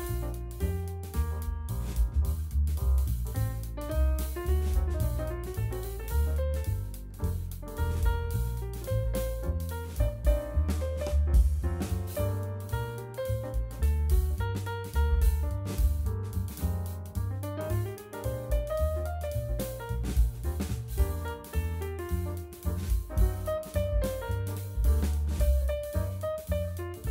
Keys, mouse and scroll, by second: 0.9 click, 1.8 Tab, 2.2 click, 3.3 click, 4.5 click, 5.6 KP_7, 6.1 scroll down 3, 6.4 shift+middle click, 7.3 shift+z, 7.5 click, 8.9 g, 10.8 KP_0, 12.0 shift+z, 12.5 Tab, 13.0-13.3 scroll down 1, 13.6 shift+middle click, 14.1 scroll up 1, 14.5-16.0 shift+middle drag, 17.5 click, 18.0 n, 18.8-20.2 scroll down 1.